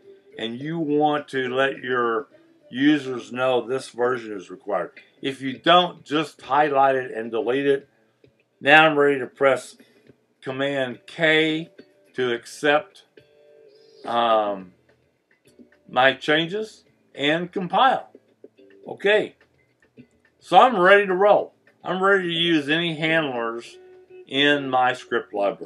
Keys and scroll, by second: 6.4 BackSpace, 11.0 super+k, 19.8 Return, 20.1 Return.